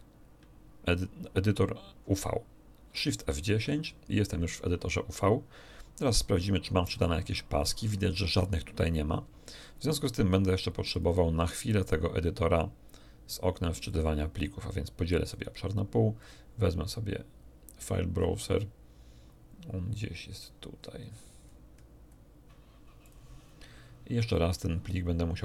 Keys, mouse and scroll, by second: 2.9 shift+F10, 6.9 click, 10.9 click, 11.8-13.1 drag, 13.9-15.5 drag, 16.2 click, 17.9-18.4 scroll up 1, 20.7-21.9 scroll up 3, 22.1 scroll up 2, 23.0 click.